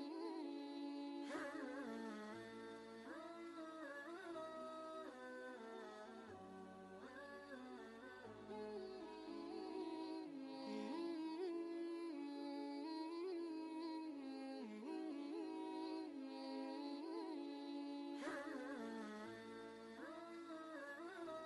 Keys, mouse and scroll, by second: 4.4 ctrl+shift+g, 5.3 y, 6.7 click, 9.1 click, 9.4 ctrl+space, 9.6 ctrl+click, 10.0 ctrl+space, 10.8-13.6 drag, 15.4 ctrl+space, 15.7 click, 15.9 click, 16.0 space, 16.2 ctrl+click, 16.6 click, 16.9 space, 16.9 click, 17.6 space, 17.8 click, 18.0 ctrl+click, 18.1 ctrl+space, 18.2 shift+click, 18.4 ctrl+click, 18.7 alt+click, 19.2 ctrl+space, 19.3 ctrl+click, 19.3 ctrl+space, 19.8 ctrl+space, 20.0-21.2 alt+drag, 21.2 ctrl+click, 21.3 ctrl+space, 21.4 click.